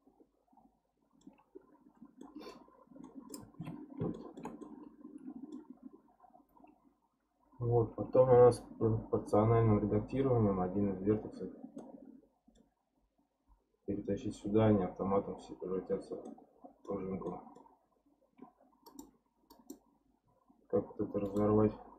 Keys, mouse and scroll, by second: 2.2 middle click, 2.7-3.0 scroll up 4, 3.0 middle click, 3.6 Tab, 4.1-7.7 shift+middle drag, 11.8-14.9 middle drag, 16.2-18.9 middle drag, 18.9 click, 19.5 click, 21.2-21.9 right drag.